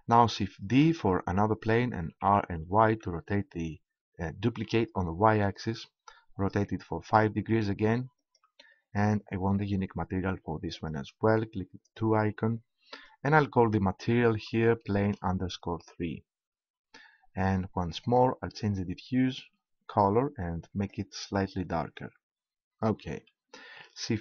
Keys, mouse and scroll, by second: 0.6 shift+d, 8.8-9.9 drag, 10.7-13.5 drag, 18.0-19.7 drag.